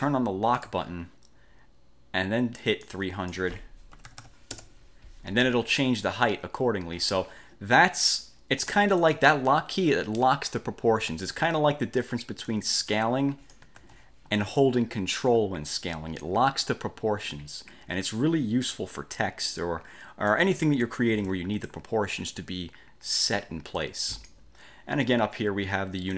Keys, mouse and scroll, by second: 0.7 click, 2.9 click, 3.8-4.8 typing, 8.9 ctrl+z, 9.1 ctrl+click, 12.6-13.8 drag, 13.9 ctrl+z, 14.7-20.7 ctrl+drag, 21.4-22.0 drag, 23.9-24.6 drag.